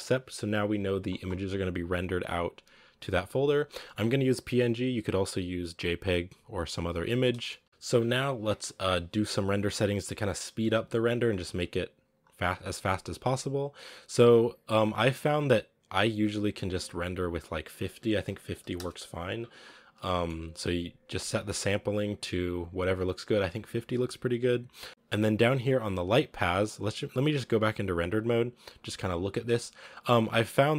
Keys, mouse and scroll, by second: 6.3-7.4 drag, 7.4-12.5 shift+middle drag, 12.5 z, 14.9-16.2 drag, 17.0-20.7 drag, 20.7 shift+middle click, 20.7 scroll up 1, 24.9 z, 26.7-27.3 scroll down 1, 27.4 z, 27.6-29.0 scroll down 2.